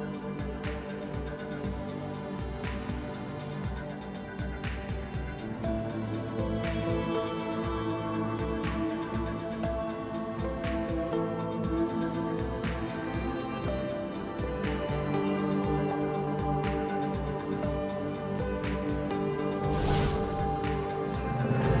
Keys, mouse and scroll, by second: 0.1 space, 1.2 g, 3.1 ctrl+space, 3.3 middle click, 3.6 click, 4.7 middle click, 4.9 click, 5.2 s, 6.0 g, 7.0 middle drag, 7.5-9.0 drag, 9.2 shift+middle click, 9.7 g, 11.2 shift+d, 11.7 click, 12.3 t, 12.4 r, 12.5 g, 13.2 s, 15.1 drag, 16.1-19.0 drag, 21.1 middle click, 21.3 click.